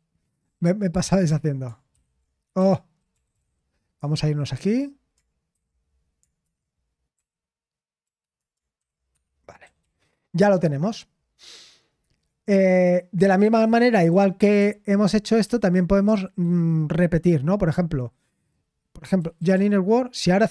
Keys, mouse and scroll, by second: 0.0-0.4 typing, 1.9 ctrl+v, 2.4 Escape, 2.6-4.5 typing, 9.1 super+7, 17.9-20.0 typing.